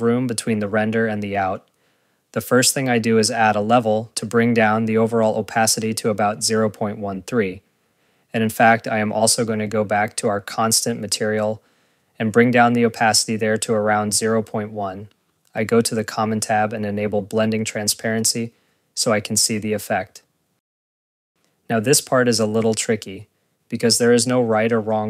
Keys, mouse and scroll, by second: 0.0-1.2 typing, 0.1 click, 1.2 click, 1.5 ctrl+s, 1.7 click, 2.0 click, 2.0-2.3 scroll, 3.5 right click, 4.6 click, 5.2 Return, 5.5 click, 6.4 scroll, 7.0 click, 9.5 ctrl+s, 9.5 scroll, 10.5 click, 11.1 scroll, 11.9 click, 13.0 click, 24.2 scroll, 24.9 click.